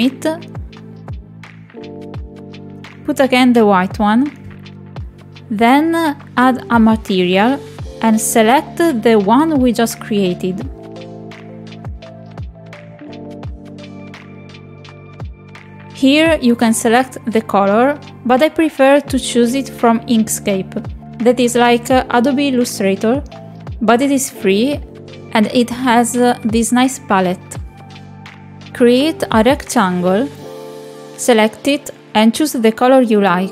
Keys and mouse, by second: 3.4 click, 7.9 click, 10.5-15.2 drag.